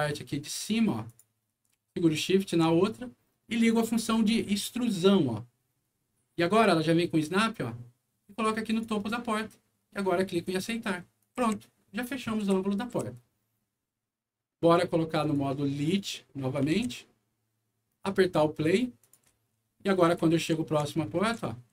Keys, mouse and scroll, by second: 1.0 click, 2.2 shift+click, 4.5 shift+click, 8.6 click, 10.4 click, 11.1-12.9 right drag, 11.3-12.9 typing, 15.1 click, 15.8 click, 16.3 middle click, 16.7 alt+w, 17.8 click, 18.9 click, 19.2 d, 20.1 w.